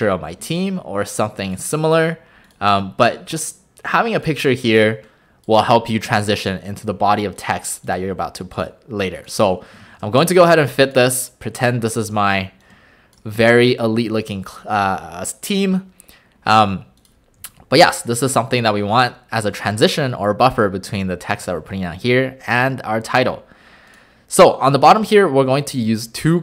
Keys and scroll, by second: 17.4 a, 21.4 a.